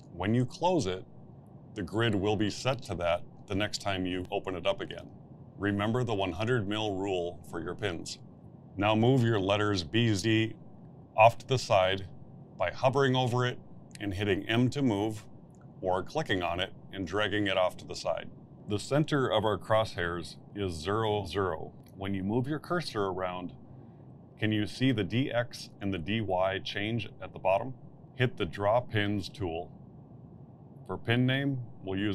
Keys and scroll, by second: 13.2 m, 32.0 KP_Add.